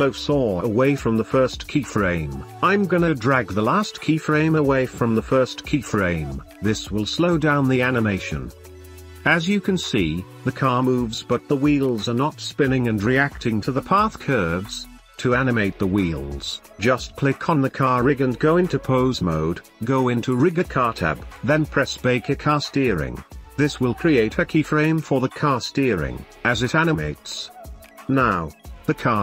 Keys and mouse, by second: 0.2 space, 1.2 space, 1.6-2.5 drag, 3.2 g, 5.6 space, 7.2-7.8 middle drag, 8.4-9.1 middle drag, 9.4 middle click, 12.0 space, 12.6-15.8 drag, 20.2 ctrl+Tab, 21.3 a, 23.0-24.8 drag, 27.5 space, 27.7-28.3 drag, 28.9 click.